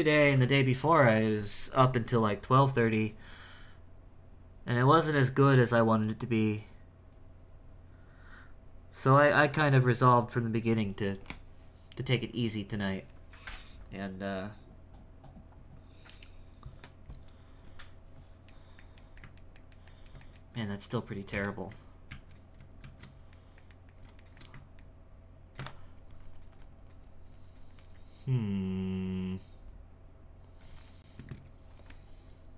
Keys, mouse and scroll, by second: 14.3-17.4 scroll up 2, 18.6-21.3 middle drag, 21.3 KP_1, 22.1 ctrl+z, 22.8 ctrl+shift+z, 23.4-27.9 ctrl+middle drag, 31.8-32.3 scroll down 3, 32.3-32.5 scroll up 1.